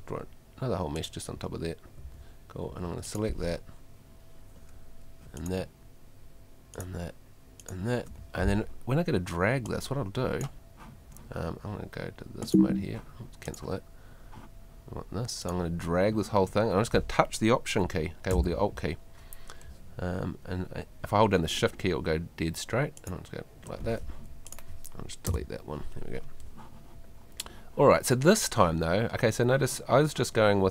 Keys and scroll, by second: 2.0 Escape, 25.3 BackSpace.